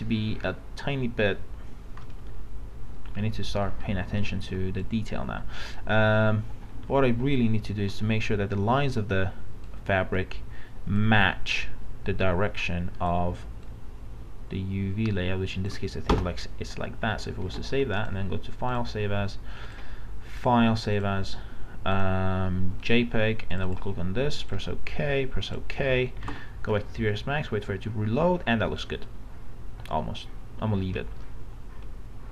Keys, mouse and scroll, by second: 2.0 middle click, 2.9-3.3 scroll up 2, 4.8-6.5 drag, 7.0 ctrl+t, 7.4-16.1 drag, 16.1 Return, 17.4 ctrl+s, 18.0 click, 26.8-32.3 middle drag.